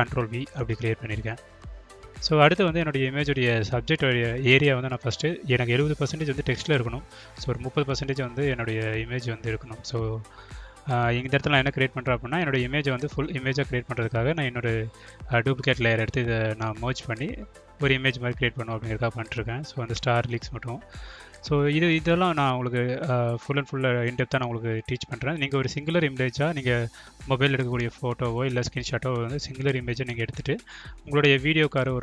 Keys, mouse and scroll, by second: 4.8 ctrl+click, 6.3 right click, 9.3 click, 13.7 click, 13.9 click, 15.1 click, 15.5 click, 15.9 click, 16.4 click, 17.7 click, 18.0 click, 18.5 click, 18.7 click, 19.0 click, 19.5 click, 21.3 click, 22.1 click, 22.9 click, 23.2 click, 23.5 click, 23.7 click, 23.8 click, 24.3 click, 24.6 click, 24.9 click, 25.2 click, 25.5 click, 25.9 click, 26.4 click, 26.7 click, 27.4 click, 27.5 click, 28.1 click, 28.5 alt+click, 28.8 Caps_Lock, 30.1 click, 30.3 click, 30.8 click, 31.0 click, 31.6 click, 31.9 click.